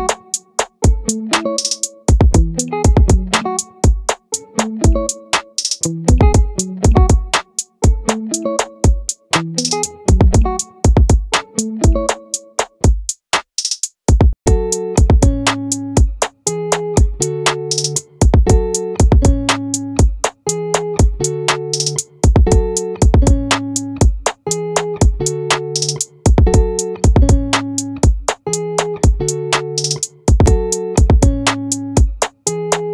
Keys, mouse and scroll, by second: 11.5 z, 32.3-32.9 middle drag.